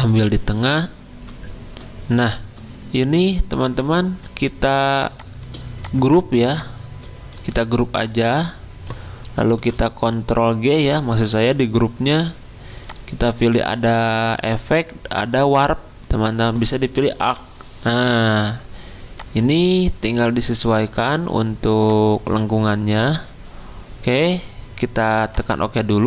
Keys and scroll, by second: 9.6 ctrl+g.